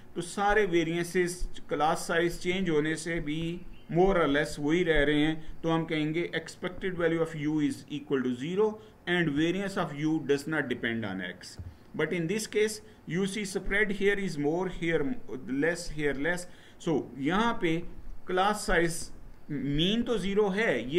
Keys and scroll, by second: 11.3 Right.